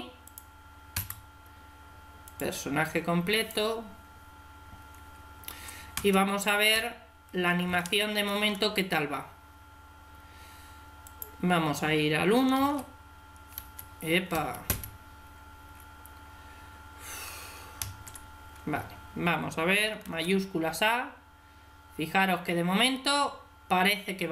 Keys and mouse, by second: 0.1-2.0 drag, 0.8 i, 3.2-4.9 drag, 5.4 \, 5.9 Tab, 6.6 Escape, 7.6 Tab, 10.9-12.4 drag, 12.4 alt+a, 12.5 alt+s, 13.4 Escape, 14.2 Escape, 14.5 Escape, 17.7 ctrl+z, 19.9 alt+a.